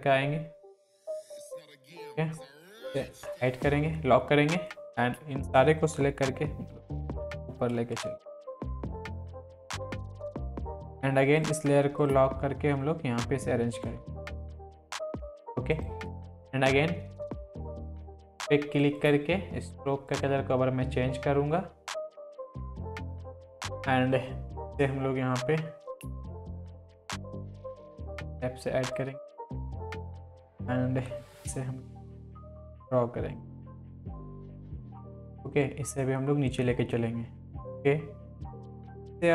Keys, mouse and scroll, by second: 6.0 Up, 7.7 Left, 9.0 Right, 9.3 click, 10.3 scroll down 1, 12.3 Down, 15.1 ctrl+t, 15.4 click, 22.4 click, 26.2 click, 30.2 Down, 31.2 Left, 32.9 Down, 34.4 Left, 36.0-37.4 drag, 37.4-38.4 scroll down 1, 38.4 click, 39.0 ctrl+click.